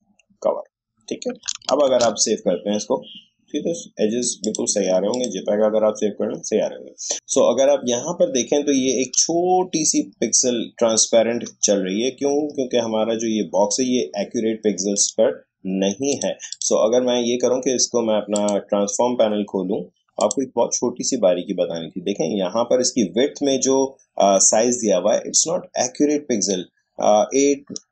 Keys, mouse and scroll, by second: 1.8 ctrl+alt+shift+s, 4.4 click, 7.1 ctrl+alt+shift+s, 12.0 shift+scroll down 1, 14.9 click, 20.2 click.